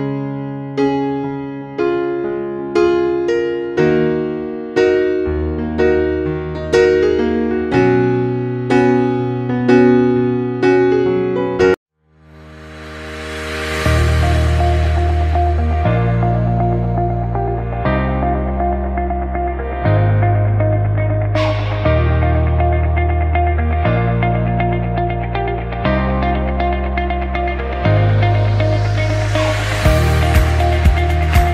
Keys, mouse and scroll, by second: 4.2 Page_Up, 7.3 Page_Up, 7.8 Page_Down, 8.3 Page_Up.